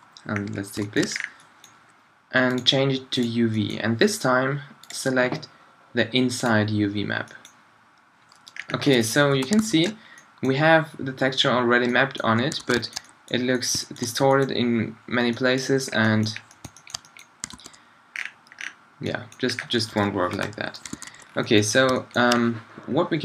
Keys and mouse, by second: 0.5 middle click, 1.0-6.5 middle drag, 7.1-8.7 middle drag, 9.4 shift+Left, 9.6 alt+a, 12.6 alt+a, 16.6-16.9 middle drag, 17.6 alt+a, 20.0 Escape, 20.4 shift+Left, 21.0 alt+a.